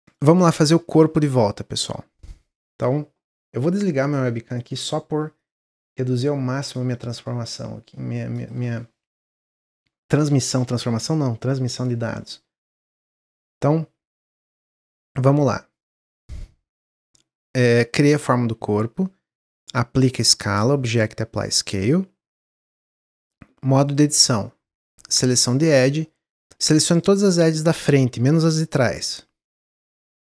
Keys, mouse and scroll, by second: 0.4-0.7 scroll up 1, 0.7-3.9 middle drag, 13.5-17.6 middle drag, 17.8-20.6 middle drag, 20.6-22.6 drag, 22.6 middle click, 23.0 Tab, 23.8 click, 24.9 click, 26.0-27.0 middle drag, 27.0 shift+click, 27.4 shift+click, 28.2 shift+click, 28.5 middle click, 29.1 shift+click, 29.4 middle click, 30.1 shift+click.